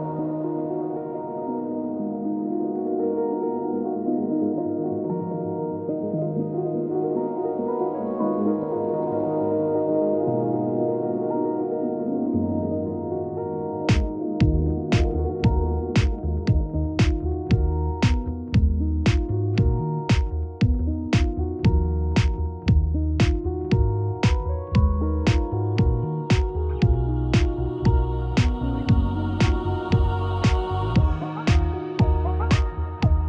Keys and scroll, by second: 23.9 ctrl+t.